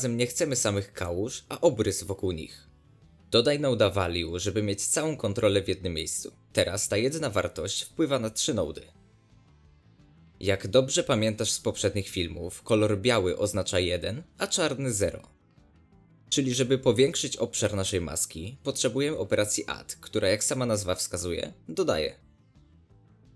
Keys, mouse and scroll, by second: 4.2 click, 6.8 click, 8.8 ctrl+shift+click, 9.1 ctrl+shift+click, 10.0-13.1 drag, 14.7-19.1 shift+drag, 19.4 ctrl+shift+click, 20.9 shift+d.